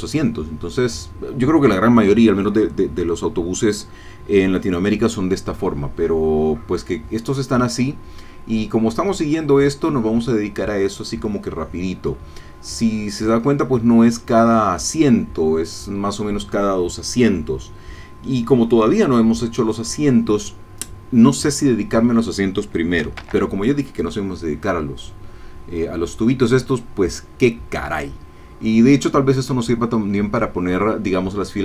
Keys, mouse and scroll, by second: 23.2 shift+a.